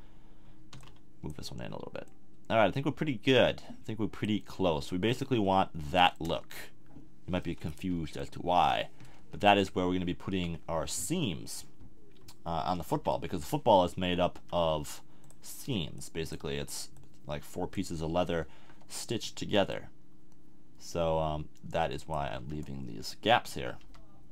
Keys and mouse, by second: 0.8 b, 5.4 a, 6.2 Tab, 7.9 KP_1, 10.3 Tab, 12.9 b, 14.4 s, 15.3-17.4 drag, 18.6 KP_7, 22.3 a, 23.8 n.